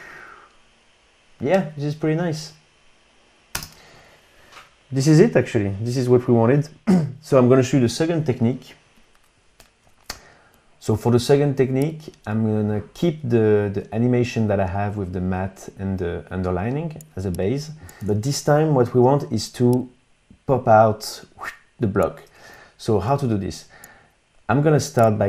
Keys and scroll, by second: 3.4 space, 18.1 super+Tab, 23.1 super+Tab.